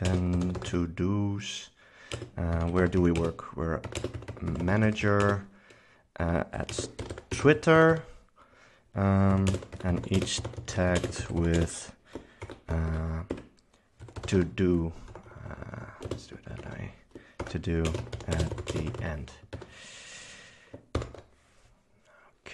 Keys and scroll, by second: 0.0-14.8 typing, 13.4 Escape, 15.2 Left, 16.2 space, 16.8 super+Right, 17.5-19.7 typing, 21.1 ctrl+super+s, 21.4 c.